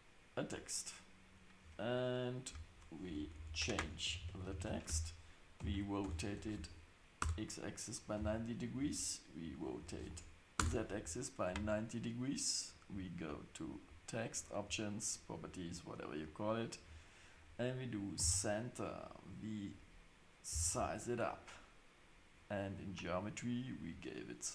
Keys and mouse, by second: 2.5 Tab, 3.0-5.6 typing, 4.9 Tab, 8.1 r, 14.3-16.8 drag, 18.2 s, 22.7 click.